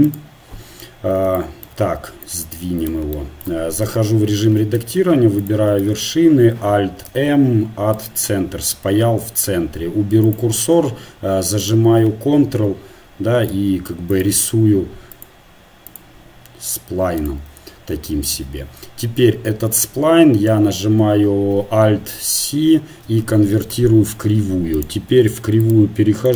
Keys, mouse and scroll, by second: 0.2 shift+a, 2.2-5.5 drag, 3.8 Tab, 5.5 ctrl+Tab, 8.1 alt+m, 10.2-23.7 drag, 18.4 Tab, 23.7 alt+c.